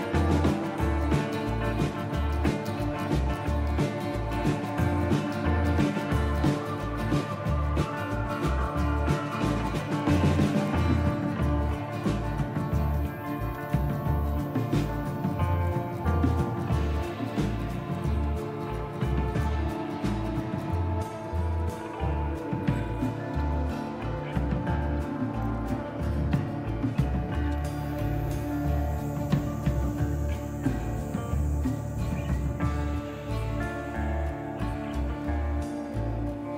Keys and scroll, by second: 0.0 Down, 0.5 Down, 0.8 Down, 1.0 Down, 1.9 Return, 3.9 Up, 4.2 Up, 5.7 Return, 7.1 Down, 7.4 Down, 7.6 Down, 7.8-9.2 Down, 10.8 Up, 11.5 Return, 13.1 Up, 13.5 Return, 14.4 Down, 14.6 Down, 16.2 Return, 16.2-18.4 typing, 17.1 Down, 18.4 Return, 21.4 Return.